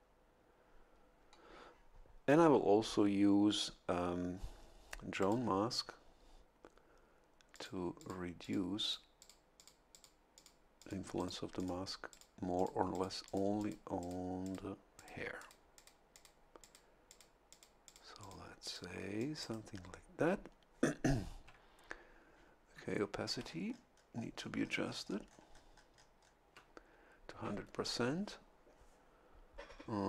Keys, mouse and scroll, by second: 5.2 click, 7.5 click, 7.9 click, 8.4 click, 8.8 click, 9.2 click, 9.5 click, 9.9 click, 10.3 click, 10.8 click, 11.1 click, 11.5 click, 12.1 click, 12.5 click, 12.9 click, 13.2 click, 14.0 click, 14.4 click, 14.9 click, 15.4 click, 15.7 click, 16.1 click, 16.6 click, 17.0 click, 17.3 middle click, 17.5 click, 17.8 middle click, 17.8 click, 18.1 middle click, 18.2 click, 18.4 middle click, 18.6 click, 19.2 click, 19.4 right click, 23.4-26.4 ctrl+scroll up 2.